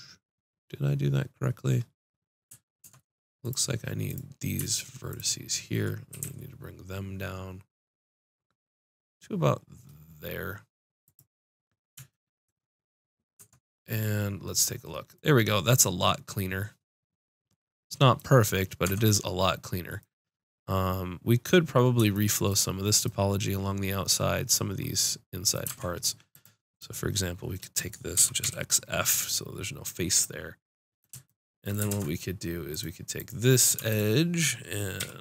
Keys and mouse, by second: 0.0-1.4 drag, 1.4 middle click, 1.9 middle click, 2.8 ctrl+Tab, 4.0-6.7 drag, 6.1 g, 11.1-12.8 drag, 13.3 Tab, 18.8 Tab, 19.8-21.5 middle drag, 25.6 ctrl+Tab, 26.7 click, 28.1 x, 29.5 middle click, 31.9 ctrl+Tab, 33.0-35.2 drag, 34.9 g.